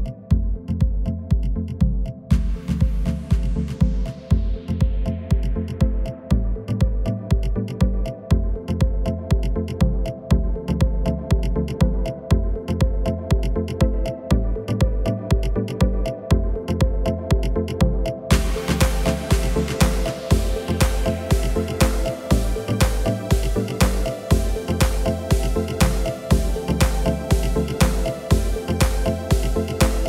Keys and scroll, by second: 2.0 w, 3.1 F11, 9.0 1, 12.0 typing, 17.7 typing, 19.4 typing, 26.9 F9, 28.6 1.